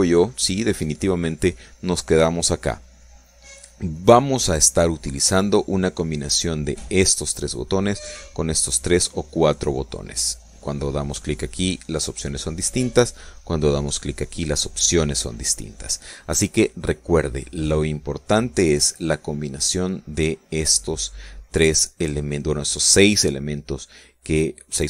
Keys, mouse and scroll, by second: 0.3 click, 0.9 click, 4.7 click, 11.1 click, 14.1 click, 16.7 click, 21.7 click.